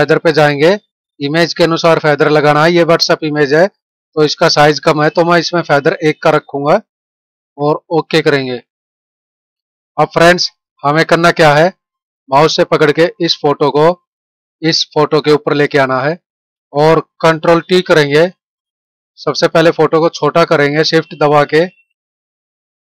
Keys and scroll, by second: 16.5 ctrl+=, 17.7 ctrl+t.